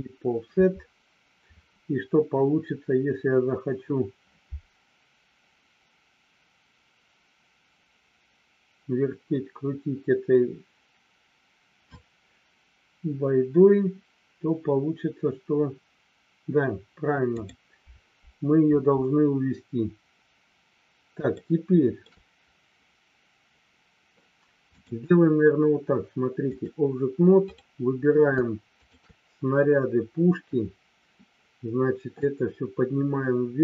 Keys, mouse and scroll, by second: 21.3 shift+middle click, 24.7-26.7 drag, 32.2-33.6 drag.